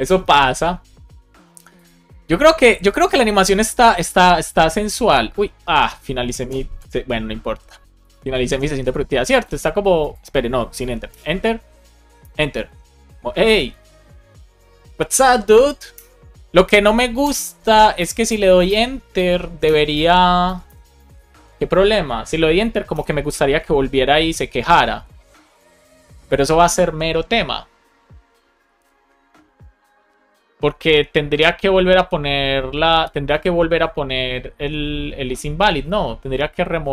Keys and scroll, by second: 11.0 Return, 12.2 Return, 15.8 Return, 17.1 Return, 18.1 Return, 19.0 Return, 19.8 Return, 20.7 Return, 22.8 Return.